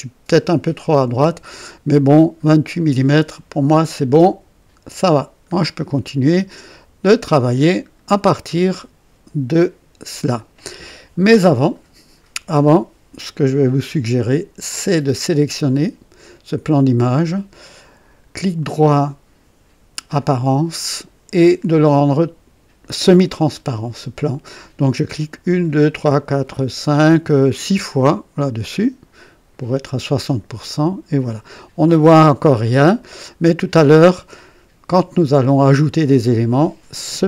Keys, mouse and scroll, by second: 4.8 click, 5.5-6.4 scroll down 4, 6.6 right click, 8.5 scroll down 1, 15.1 click, 18.5 right click, 20.1 click, 25.3 click, 26.6 click, 27.4 click, 30.2 click.